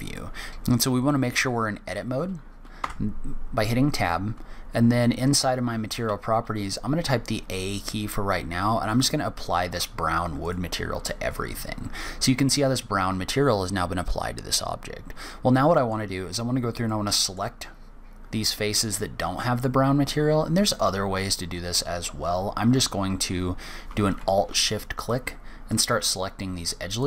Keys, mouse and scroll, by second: 0.5 Tab, 2.6 Tab, 5.8 a, 9.5 click, 10.2 click, 11.1 scroll up 1, 11.7-12.0 scroll down 1, 12.0 middle click, 15.8-16.3 scroll up 2, 16.3-16.7 scroll down 3, 16.6 middle click, 17.4-18.9 scroll up 1, 18.9-19.4 scroll up 1, 24.7 alt+shift+click, 25.5 alt+shift+click, 26.7 alt+shift+click.